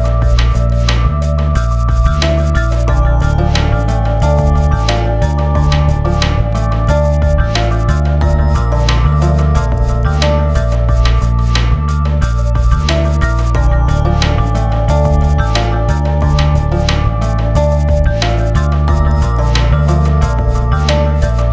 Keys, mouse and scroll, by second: 0.2 scroll down 1, 0.8 click, 1.1 F4, 2.4-5.1 drag, 5.1 Down, 9.0 click, 12.0 F12, 12.8 click, 14.6 F12, 15.3 click, 17.8 right click, 18.8 click, 20.6 click.